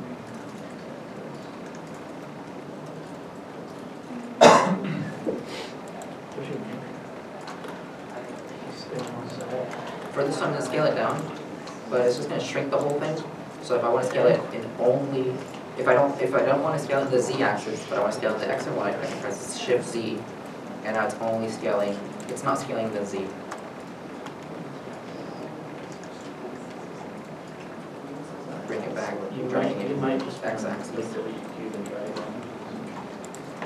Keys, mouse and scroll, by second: 3.7 shift+middle click, 3.8-4.3 shift+scroll up 2, 4.8 3, 4.9 middle click, 5.6 shift+middle click, 7.0 e, 7.0 middle click, 7.6 2, 7.7 scroll, 7.7 scroll down 1, 8.8 shift+click, 10.0 scroll down 1, 11.0 s, 20.0 shift+z, 24.2 middle click, 27.9 g, 28.6 x, 31.1 middle click, 31.6-32.1 scroll down 1, 32.1-32.7 scroll down 1, 32.7 middle click, 32.8 scroll up 1.